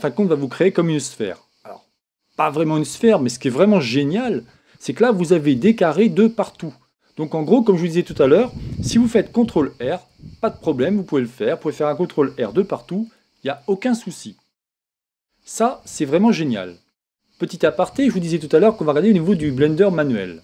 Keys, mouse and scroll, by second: 0.2-2.0 middle drag, 5.6-7.3 middle drag, 9.3 ctrl+r, 10.8 click, 12.6 ctrl+r, 13.6 click, 15.4 ctrl+z, 15.7 ctrl+z.